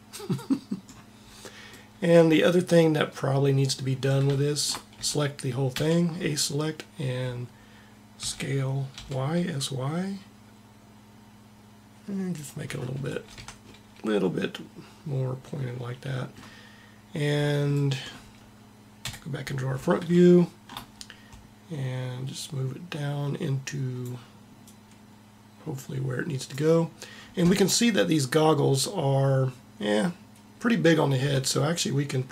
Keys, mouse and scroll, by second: 4.8 a, 5.5 a, 8.0 s, 12.5 middle click, 12.8 a, 13.2 Tab, 13.5 middle click, 18.8 KP_1, 22.2-23.8 drag, 24.3-26.3 drag.